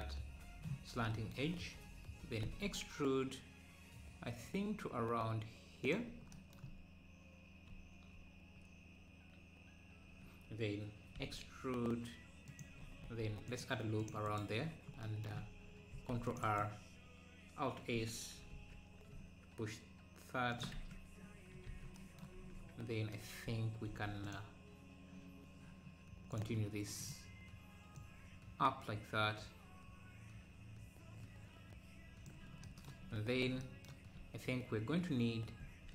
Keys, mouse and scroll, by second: 2.4 e, 6.7-7.2 scroll up 1, 11.1 e, 13.0 ctrl+r, 14.7 right click, 15.9 ctrl+r, 18.6 alt+s, 20.8 Tab, 21.3 scroll down 1, 22.3 Tab, 24.3 click, 26.3 click, 28.0 click, 35.6 ctrl+r.